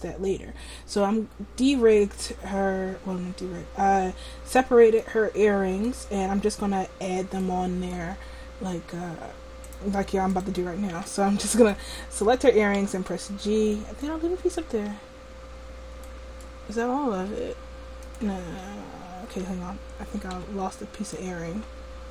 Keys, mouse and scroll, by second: 5.0 middle click, 9.7 click, 11.0 a, 12.7 g, 13.3 click, 14.9 ctrl+z, 17.2 g, 19.3 ctrl+z, 19.3 a, 20.3 b.